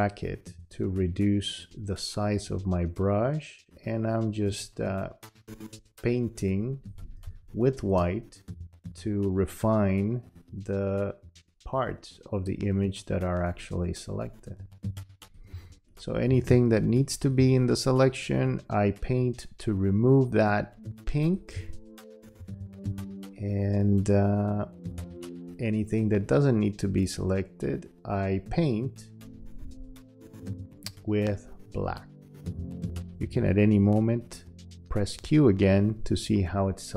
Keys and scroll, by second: 7.2 space, 15.5 space, 21.5 space, 33.2 q.